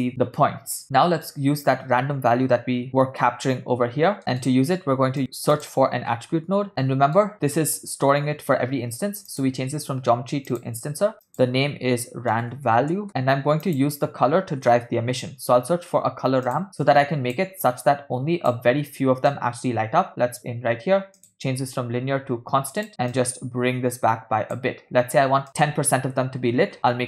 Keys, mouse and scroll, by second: 0.8 middle click, 2.9 middle click, 4.2 middle click, 4.9 shift+a, 6.6 t, 6.7 click, 6.9 middle click, 9.5-10.8 drag, 11.3-13.1 drag, 13.1 ctrl+middle click, 13.3 shift+a, 17.0 click, 17.9 click, 19.4-20.5 drag, 21.3-22.9 drag, 23.3 click, 25.5-27.0 drag.